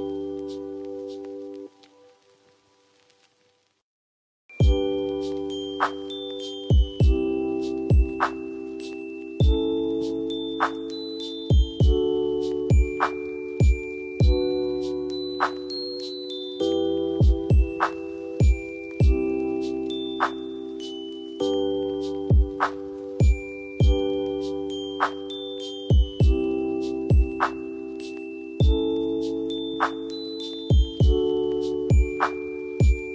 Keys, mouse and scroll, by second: 2.5 click, 9.8 click, 14.9 F2, 15.2-15.8 drag, 18.2 right click, 19.2 click, 19.7 F4, 21.3-23.7 drag, 31.7 right click, 32.6-33.1 drag.